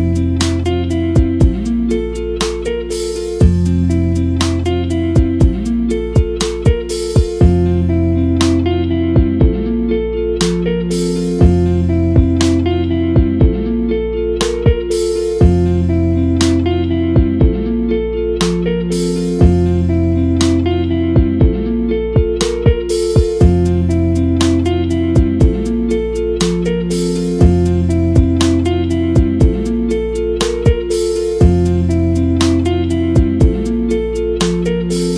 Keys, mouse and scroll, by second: 6.6 click, 7.8 KP_Decimal, 8.2 click, 12.3 click, 20.8-21.9 middle drag, 21.9 scroll down 1, 22.2 shift+middle drag, 22.3 scroll up 1, 22.7-27.3 shift+middle drag, 27.3-27.8 scroll down 1, 27.8-29.0 middle drag, 29.0-34.1 scroll up 1, 34.1-35.1 scroll up 1.